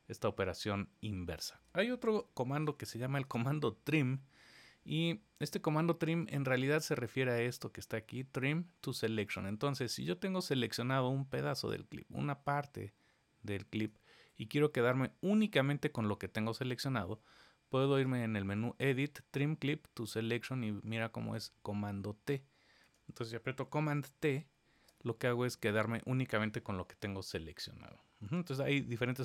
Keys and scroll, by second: 2.0 super+z, 2.7 super+z, 24.2 super+t, 28.1 super+z.